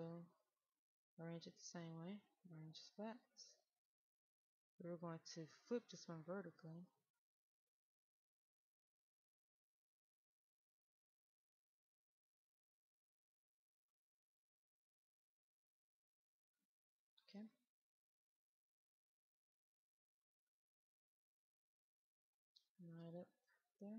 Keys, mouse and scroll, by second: 2.6 click, 5.1 right click, 6.6-9.8 drag, 10.1 right click, 12.4-15.7 drag, 15.7 right click, 17.2-17.9 scroll down 1, 17.9 middle click, 20.0 click, 20.5-22.5 right drag, 22.5-22.9 scroll up 1, 22.9-23.9 right drag.